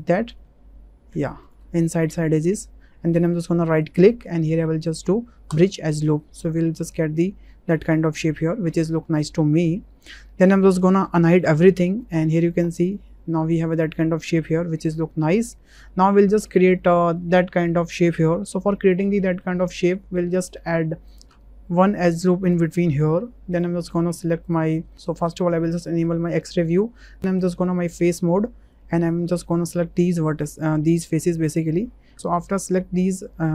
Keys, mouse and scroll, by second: 0.7 ctrl+z, 1.7 click, 3.8-5.6 drag, 6.1 middle click, 6.4 click, 6.7 middle click, 7.8 middle click, 8.6 Tab, 9.2 middle click, 11.3 alt+h, 12.9-13.8 drag, 13.8-15.4 middle drag, 17.3 shift+middle drag, 18.7 shift+middle drag, 19.1 click, 19.8 Tab, 21.0 click, 22.4 click, 25.9 3, 27.1-31.8 drag, 32.1 ctrl+z.